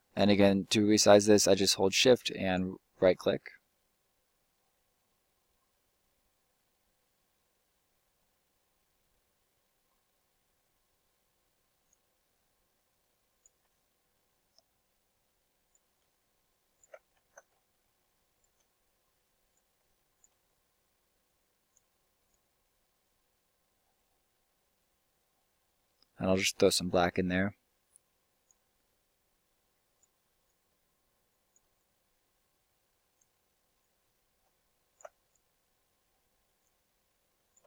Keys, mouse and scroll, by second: 2.3-3.0 right drag, 3.0-5.4 drag, 12.0-15.5 right drag, 16.2-18.2 right drag, 19.1-19.8 right drag, 19.8-21.8 middle drag, 28.7-29.6 right drag, 30.0 right click, 30.3 click, 30.5 right click, 30.8 click, 32.0 click, 32.6 click, 33.5 click, 34.3 right click, 34.9-37.6 drag.